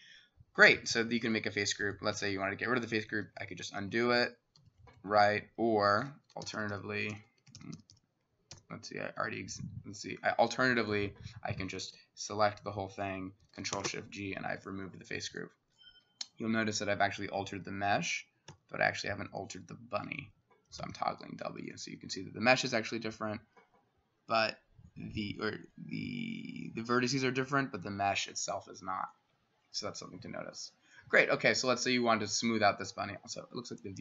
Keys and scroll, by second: 2.2 s, 2.9 ctrl+z, 3.3 ctrl+z, 3.5 ctrl+z, 3.9 ctrl+z, 5.1 Escape, 6.5 ctrl+shift+y, 6.6 ctrl+shift+y, 7.6 ctrl+y, 7.8 ctrl+y, 8.0 ctrl+y, 8.6 ctrl+y, 11.9 ctrl+a, 13.8 ctrl+shift+g, 14.5 Escape, 18.5 w, 20.8 w, 21.7 w.